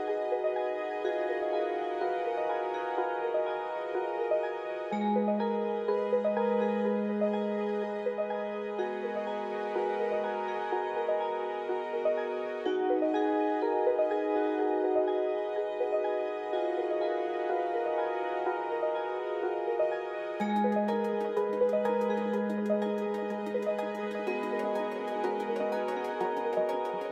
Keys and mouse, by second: 0.2 alt+z, 0.6 middle click, 1.5 x, 3.6 middle click, 4.7 middle click, 5.3 Tab, 5.6 middle click, 6.8 Tab, 7.3 middle click, 9.1 click, 10.5 middle click, 12.2 middle click, 13.2 middle click, 14.4 ctrl+z, 15.5 middle click, 18.2 click, 19.0 middle click, 19.2 Tab, 20.4 shift+middle click, 22.2 2, 23.1 click, 24.0 shift+click, 24.6-25.9 middle drag, 26.8 middle click.